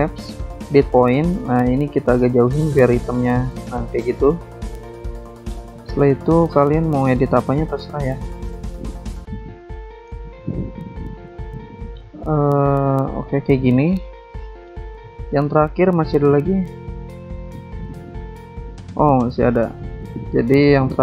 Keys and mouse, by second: 0.0 double click, 1.2 double click, 5.8 click, 6.4 ctrl+z, 7.0 click, 8.4 click, 9.0 click, 10.3 click, 11.6 ctrl+z, 13.3 click, 15.1 alt+Tab, 17.4 click, 17.8 click, 19.3 alt+Tab.